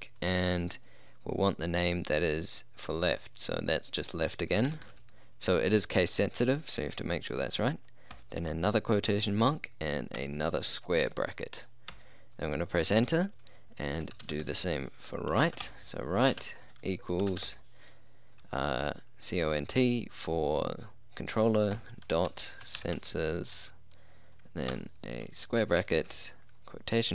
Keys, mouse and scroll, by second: 4.7 l, 4.9 e, 4.9 f, 5.1 t, 8.2 shift+', 12.0 Return, 14.1-14.5 typing, 15.5-17.5 typing, 21.8-23.6 typing, 26.0 shift+'.